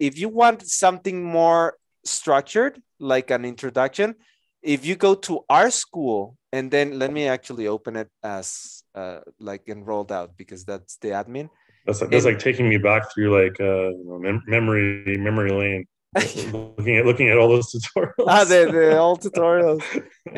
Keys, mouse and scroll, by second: 8.0 ctrl+shift+n.